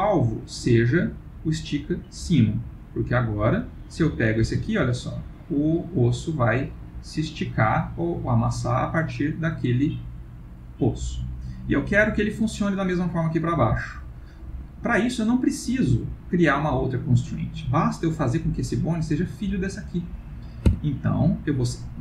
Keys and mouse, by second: 1.1 click, 3.6 click, 4.5 g, 13.4 click, 13.6 g, 18.0 click, 20.7 Tab.